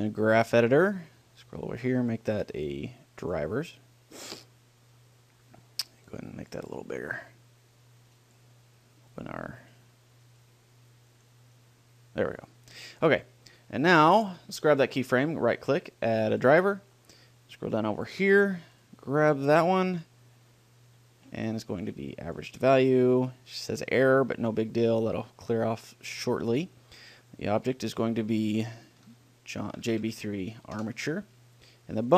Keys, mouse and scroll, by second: 1.3-2.3 middle drag, 2.3-4.0 drag, 5.4-7.0 drag, 8.4-14.4 drag, 15.2-17.0 right drag, 17.8 click, 21.9-23.6 drag, 27.4-29.1 drag.